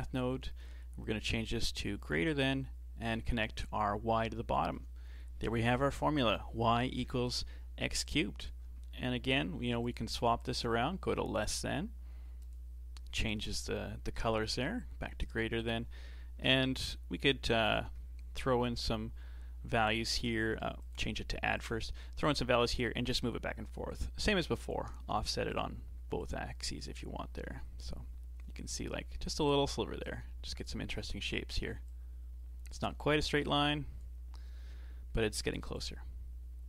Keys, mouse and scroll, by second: 3.0 click, 4.3 shift+middle click, 5.1-7.3 scroll down 1, 7.3-8.0 scroll down 1, 8.0 click, 9.0 g, 10.4-15.4 drag, 15.6 click, 16.2 shift+d, 17.6-20.3 drag, 20.8-24.7 drag, 25.0 shift+d, 26.2-29.2 drag, 30.0-34.8 drag, 34.8 shift+middle click, 35.7-36.6 drag.